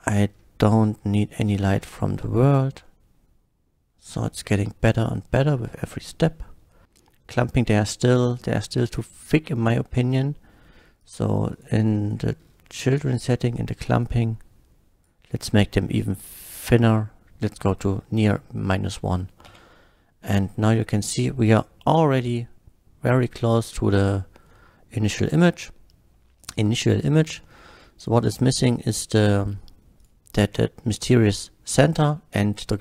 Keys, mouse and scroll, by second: 0.0 middle click, 1.1 click, 1.7 KP_0, 1.9 Return, 2.5 click, 2.9-3.7 middle drag, 4.2 middle click, 5.0 click, 11.0 click, 11.5 click, 11.9 click, 12.5 scroll down 2, 13.2 click, 14.0-15.0 drag, 15.6 shift+middle drag, 17.9 shift+scroll up 2, 18.7 middle click, 19.5 F12, 24.2 middle click, 26.4 click, 27.5-27.9 shift+middle drag, 28.2 click, 30.0 shift+click.